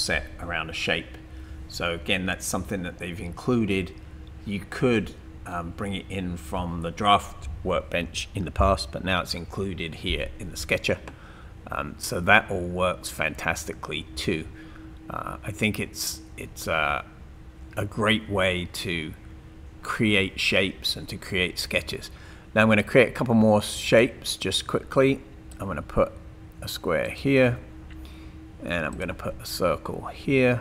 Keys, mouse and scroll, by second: 23.9 click, 25.5-26.9 drag, 27.1 click, 28.9 click.